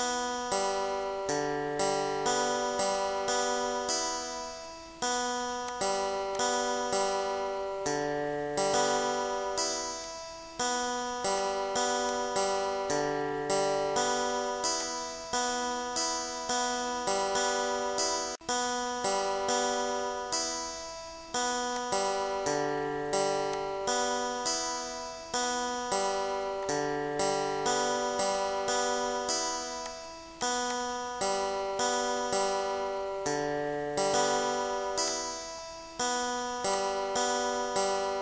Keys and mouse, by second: 1.2 5, 1.5 6, 2.3 click, 4.2 9, 4.6 1, 5.7 click, 6.4 click, 7.1 1, 8.0 click, 10.1 click, 11.4 click, 12.1 click, 13.1 ctrl+d, 14.0 click, 14.9 click, 17.1 shift+click, 18.2 ctrl+g, 19.3 shift+click, 20.3 click, 21.8 click, 22.5 click, 23.5 click, 25.5 click, 26.7 click, 29.9 click, 31.3 click, 32.7 click, 35.1 click, 36.8 click.